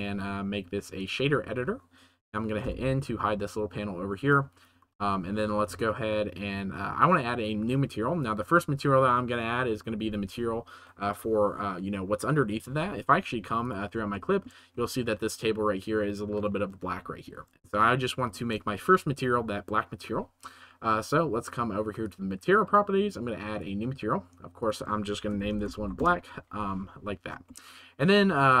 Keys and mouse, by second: 4.8 n, 4.8 t, 13.6 drag, 14.1 shift+middle drag, 17.7-18.1 shift+middle drag, 18.1 shift+click, 18.1 shift+middle click, 23.5 right click, 24.6-26.0 right drag, 27.6 shift+middle click.